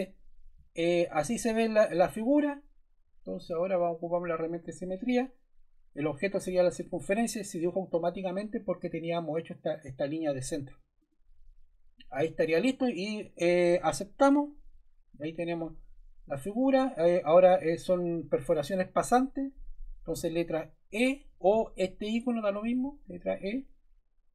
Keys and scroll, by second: 22.6 e.